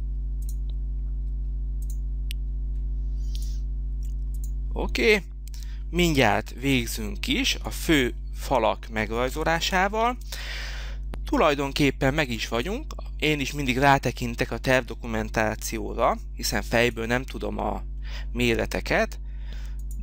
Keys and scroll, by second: 6.1 h.